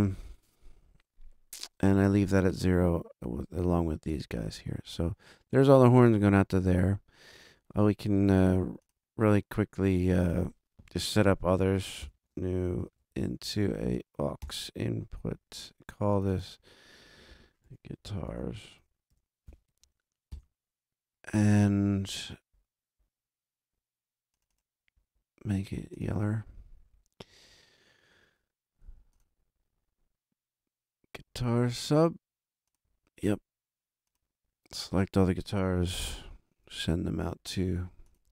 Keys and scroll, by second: 12.0 shift+super+n, 13.0 shift+super+Right, 13.4 super+Down, 14.4 super+Return, 17.4-20.0 typing, 20.3 shift+Return.